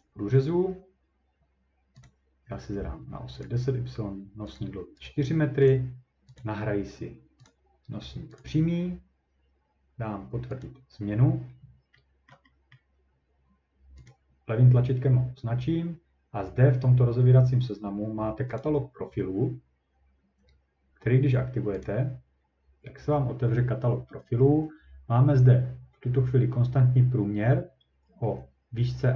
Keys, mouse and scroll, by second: 0.5 scroll down 1, 2.1 click, 3.4 click, 4.6 click, 5.1 right click, 5.7 click, 6.4 click, 7.5 click, 8.4 click, 10.6 click, 11.1 scroll, 12.3-13.4 ctrl+scroll, 14.1 click, 17.3 scroll down 2, 17.4 scroll, 17.5 scroll down 1, 21.8 click.